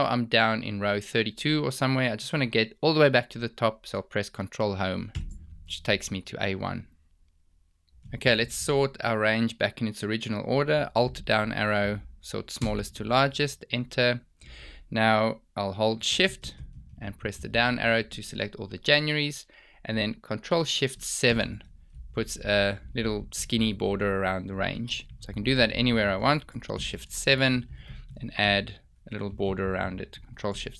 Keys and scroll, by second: 4.5 ctrl+Home, 11.2 alt+Down, 15.4 shift+Down, 20.4 ctrl+shift+7.